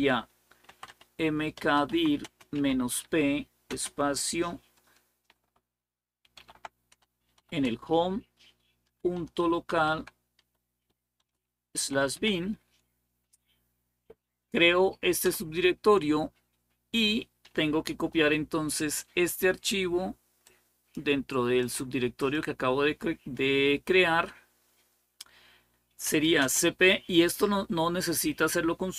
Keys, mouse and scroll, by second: 0.2-3.5 typing, 6.1 typing, 7.2 typing, 8.4-12.5 typing, 20.3-22.8 drag, 25.6-26.5 typing.